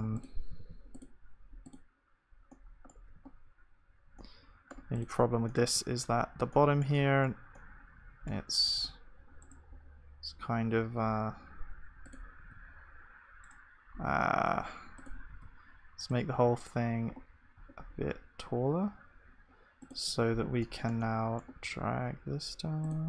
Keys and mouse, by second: 0.6 ctrl+s, 3.3 KP_1, 6.1 Tab, 8.7 g, 9.4-15.4 middle drag, 15.4-20.2 drag, 15.4 g, 20.2 Tab, 21.6-22.8 middle drag, 21.6 g.